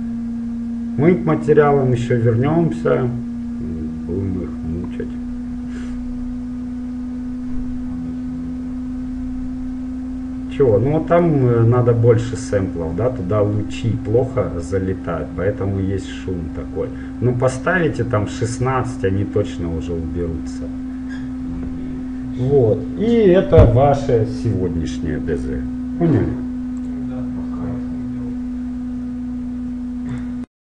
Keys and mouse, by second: 16.4-25.6 middle drag.